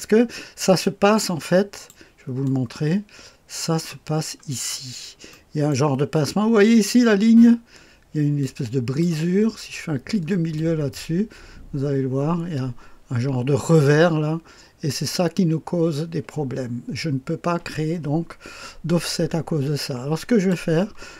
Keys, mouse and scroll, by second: 0.8-1.9 drag, 2.4-4.1 drag, 4.1-5.3 scroll up 3, 5.3 middle click, 5.3-5.7 scroll up 1, 6.1 click, 6.8-8.3 scroll up 1, 8.3 click, 9.7-10.8 middle drag, 10.5-20.5 drag.